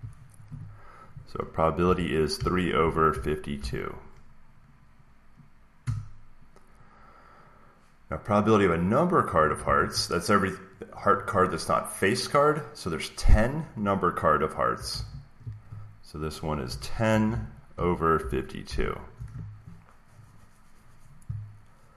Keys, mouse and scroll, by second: 1.7 middle click, 2.0-4.0 typing, 5.7 Return, 9.5 alt+Tab, 14.8 alt+Tab, 16.3-19.1 typing.